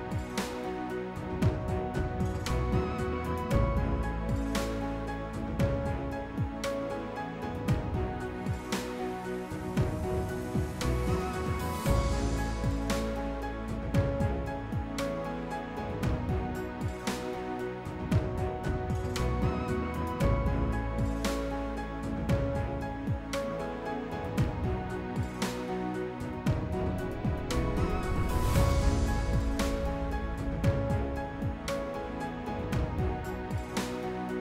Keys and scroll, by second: 3.9 s, 4.5 s, 7.9 s, 11.7 s, 14.2 s, 16.8 s, 20.4 s, 21.2 s.